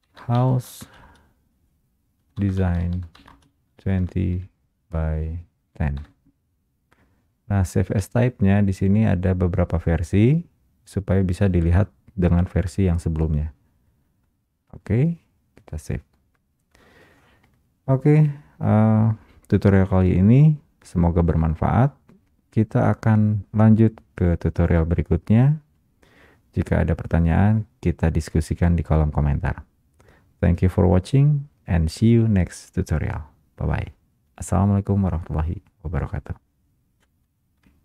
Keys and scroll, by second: 1.3 space, 37.6 space.